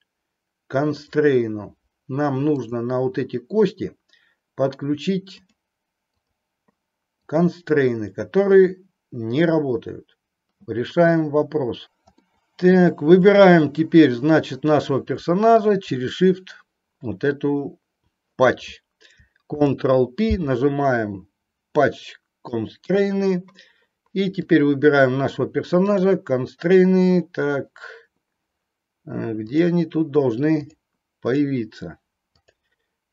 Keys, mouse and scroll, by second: 1.0 click, 5.3 click, 6.1 click, 7.2-10.0 drag, 12.3-12.9 middle drag, 15.9 click, 26.1-26.7 drag, 29.7 click, 30.7 click, 32.5 click.